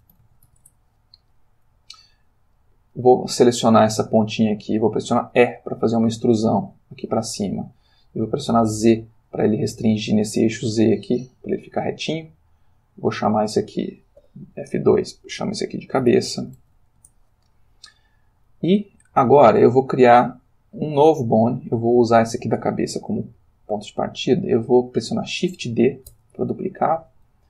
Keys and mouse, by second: 0.0-1.0 typing, 2.5 click, 5.3 e, 8.8 z, 12.3 click, 13.1 click, 14.3 F2, 16.0-16.8 typing, 17.0 shift+Return, 22.0 click, 26.1 shift+d.